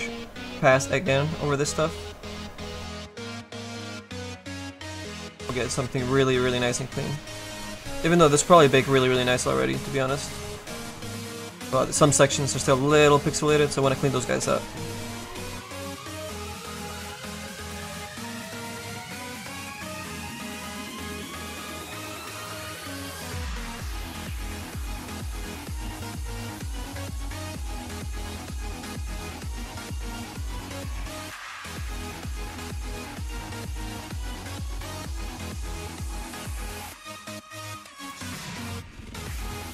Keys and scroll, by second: 33.1 F2.